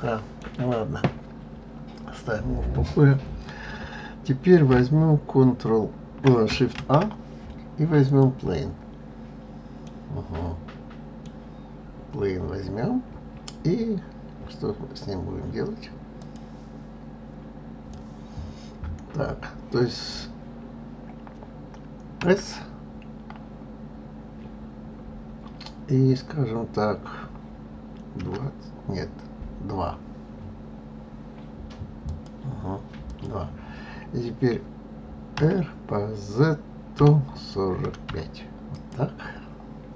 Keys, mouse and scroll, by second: 6.3 shift+a, 9.4-12.4 middle drag, 21.9 s, 32.8 click, 35.1 r.